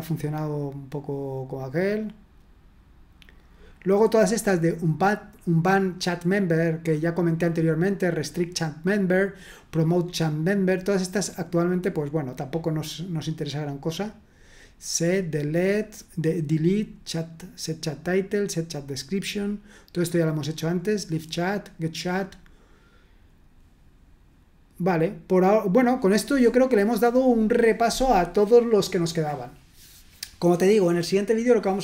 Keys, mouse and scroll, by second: 0.2-1.4 scroll down 2, 3.5-4.4 scroll down 2, 11.6-12.4 scroll down 2, 12.8-13.4 scroll down 2, 19.7-21.2 scroll down 3, 22.5-23.2 scroll down 1.